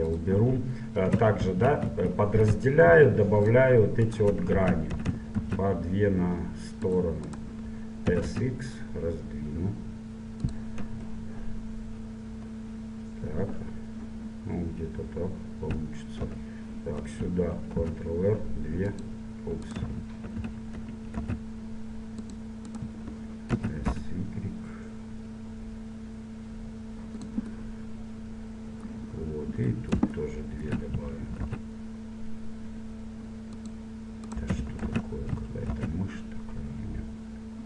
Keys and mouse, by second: 0.7-4.1 drag, 1.5 ctrl+3, 2.9 ctrl+r, 4.6 ctrl+z, 5.4 ctrl+r, 8.2 s, 11.0 KP_1, 12.9 middle click, 16.3 KP_7, 17.9 ctrl+r, 20.4 ctrl+z, 21.3 ctrl+r, 23.7 s, 27.7-30.6 middle drag, 31.5 ctrl+r, 34.9 ctrl+z, 35.7 ctrl+r.